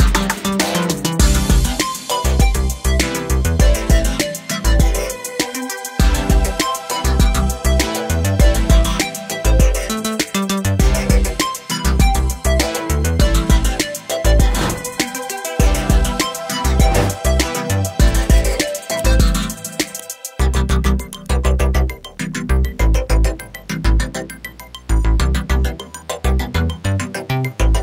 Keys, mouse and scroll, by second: 0.8 click, 3.6 scroll down 1, 9.0 scroll down 1, 12.5 click, 14.1 click, 16.7 click, 17.2 F4, 21.1 F9, 22.8 click, 24.5 ctrl+o, 25.1 scroll down 1.